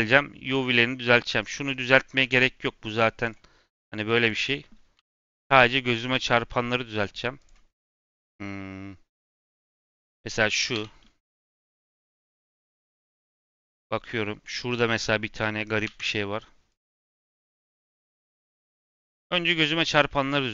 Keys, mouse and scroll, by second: 1.0-1.3 middle drag, 1.3 click, 3.2 click, 4.1 click, 6.1-6.6 drag, 6.6-7.3 middle drag, 7.3 click, 7.7 middle click, 8.3 scroll up 1, 8.4 middle click, 9.1-9.5 scroll down 1, 9.5 scroll up 1, 9.8 click, 10.7 l, 11.8-12.8 drag, 12.8-13.3 middle drag, 13.3-13.7 scroll up 2, 13.7 middle click, 14.0-14.4 scroll up 1, 14.4 click, 15.8 l, 16.6-17.3 drag, 17.3 scroll down 2, 17.5 middle click, 17.9 scroll up 2, 18.1-18.9 scroll down 3, 18.5 middle click, 18.9 middle click, 19.1-19.8 scroll up 2, 19.8 click.